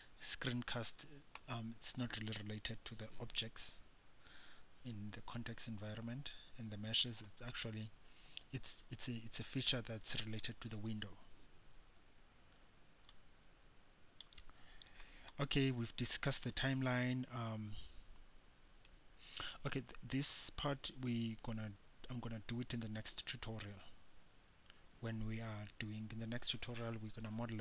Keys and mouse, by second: 7.4 middle click, 13.4-15.7 drag.